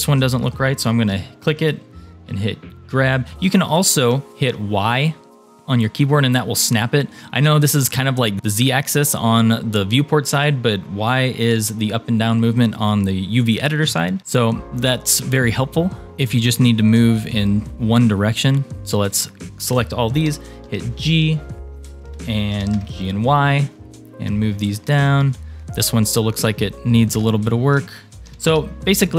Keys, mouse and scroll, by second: 1.1 g, 15.3 shift+middle click, 16.1 shift+click, 16.8 shift+click, 17.2 shift+click, 17.8 shift+click, 18.3 shift+click, 20.3 g, 21.8 shift+middle click, 22.5 g, 25.5 click, 26.9 shift+click, 27.4 shift+click, 28.3 g.